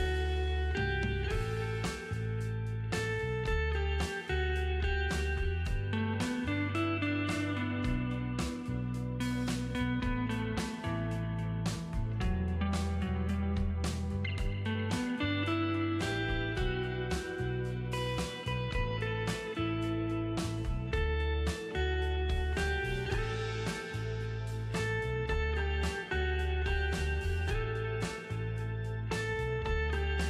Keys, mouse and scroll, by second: 1.3 click, 12.0 space, 12.2 right click, 12.2 right click, 12.7 space, 12.8 right click, 13.0 click, 14.2 space, 14.3-17.6 ctrl+drag, 17.6 shift+F6, 20.5 space, 20.9 click, 20.9-22.7 ctrl+drag, 22.7-23.1 scroll up 4, 23.1 o, 24.0 click.